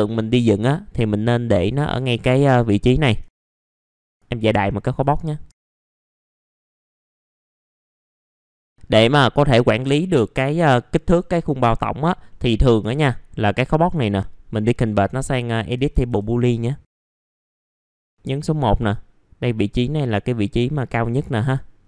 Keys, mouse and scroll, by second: 0.6-1.6 drag, 1.8-2.7 scroll up 1, 2.8 ctrl+right click, 3.3 click, 3.6 right click, 3.8 middle click, 3.9 ctrl+right click, 4.0 click, 5.1 right click, 5.4 F3, 5.5 middle click, 5.5 scroll down 1, 5.8 click, 6.0 alt+middle click, 6.4 click, 6.9 alt+middle click, 7.0 click, 7.1 scroll up 1, 7.2 click, 7.3 scroll down 1, 7.4 middle click, 8.2 click, 8.4 F3, 8.6 middle click, 12.8 F4, 13.5 right click, 14.8 click, 16.4 right click, 17.2 click, 17.6 middle click, 17.9 click, 18.0-18.5 scroll up 1, 18.5-20.7 drag, 20.7 middle click, 21.2-21.8 drag.